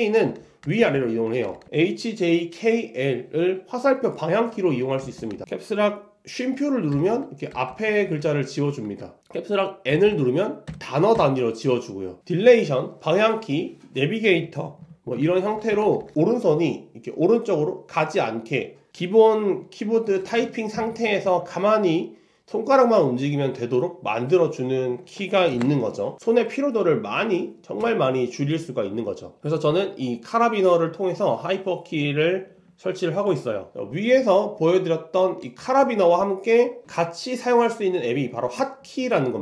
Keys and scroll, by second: 10.1 alt+BackSpace, 15.3 ctrl+alt+shift+super+Left, 15.8 shift+Right, 16.0 shift+Left, 21.0 ctrl+alt+super+Right, 25.6 super+[.